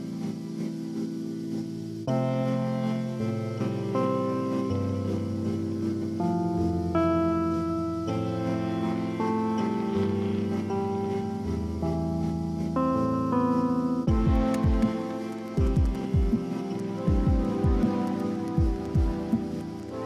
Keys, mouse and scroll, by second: 0.0-0.1 typing, 3.5 ctrl+click, 5.1 ctrl+t, 7.8 ctrl+t, 8.9 alt+click, 17.4 ctrl+j, 18.1 ctrl+click.